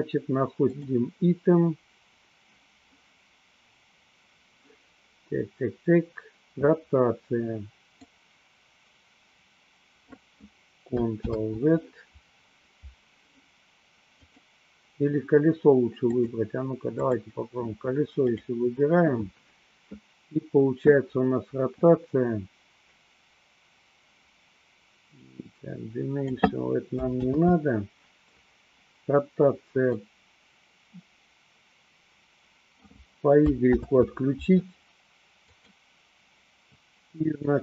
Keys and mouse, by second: 8.1-10.4 drag, 11.3 ctrl+z, 14.1 click, 16.0-17.3 drag, 25.4-26.4 drag, 27.4 ctrl+z, 29.9-33.0 drag, 34.0 ctrl+z, 35.5 click, 37.4-37.6 drag.